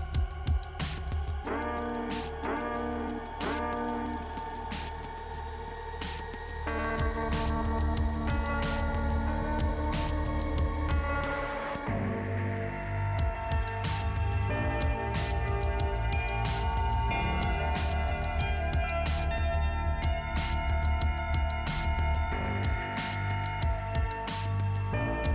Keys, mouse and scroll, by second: 3.4 click, 3.8 click, 6.9 middle click, 7.8-8.5 scroll up 2, 8.5 click, 11.0 click, 14.0 click, 16.0 scroll up 1, 16.9 click, 18.5 click, 21.2 click, 21.5 right click, 21.7 double right click, 21.9 typing, 23.3 click, 23.9-24.3 scroll down 1, 25.1 p.